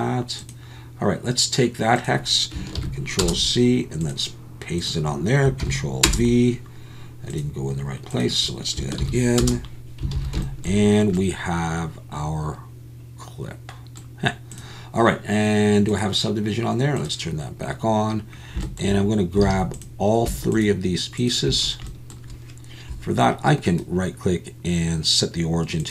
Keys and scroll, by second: 10.2 alt+a, 19.5 alt+a.